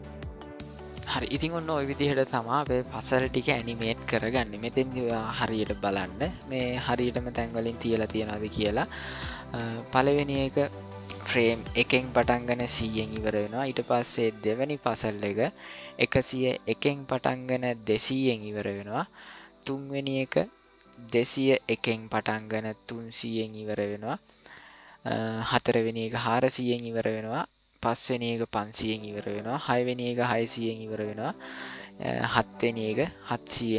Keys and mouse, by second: 5.3-9.1 drag, 9.8 click, 11.3-14.0 drag, 15.5-19.2 drag, 19.5 click, 20.8-23.7 drag, 25.0 click, 26.5 click, 28.7 click, 30.7-33.7 drag.